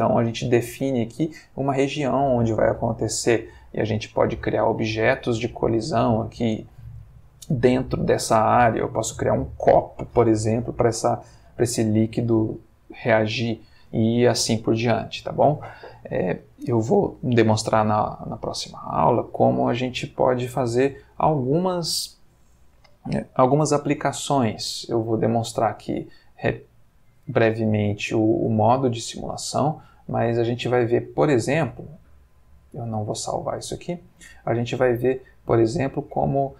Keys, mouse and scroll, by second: 0.3 click, 3.6-4.3 middle drag, 4.4-5.0 ctrl+middle drag, 5.1-5.9 ctrl+shift+middle drag, 11.4-12.1 middle drag, 11.9 Escape, 12.5-13.8 ctrl+middle drag, 25.3 click, 28.2 click, 30.9 click, 33.1 click, 34.6-36.5 middle drag.